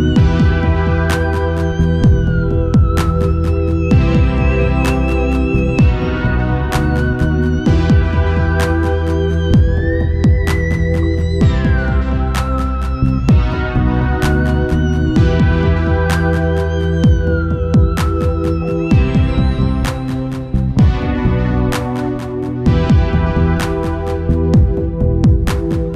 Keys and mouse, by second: 2.1 middle click, 2.4 middle click, 2.6-4.0 middle drag, 4.0-6.8 right drag, 8.3-14.6 drag, 14.6 ctrl+s, 17.0 click, 20.2-21.9 drag, 21.0 right click, 21.1 middle click, 21.2 right click, 21.4 right click, 21.5-22.7 middle drag, 23.8 Tab, 24.7-25.9 drag.